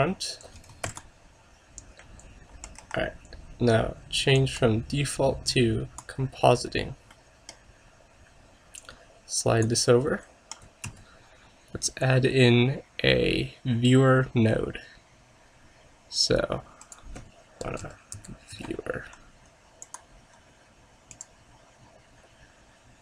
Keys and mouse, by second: 0.0 click, 0.9 ctrl+s, 2.9 KP_0, 4.5-6.1 drag.